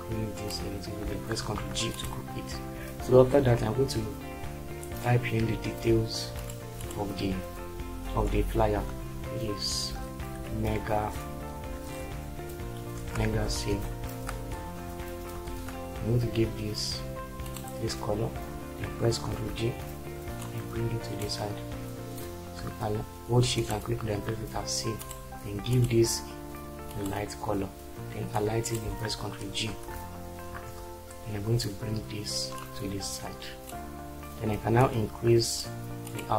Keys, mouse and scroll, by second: 1.5 ctrl+g, 9.9 shift+m, 10.6 shift+e, 11.5 BackSpace, 11.9 e, 12.9-14.6 typing, 15.4 ctrl+space, 19.3 ctrl+d, 24.3 shift+c, 29.7 ctrl+g, 30.5 shift+F4.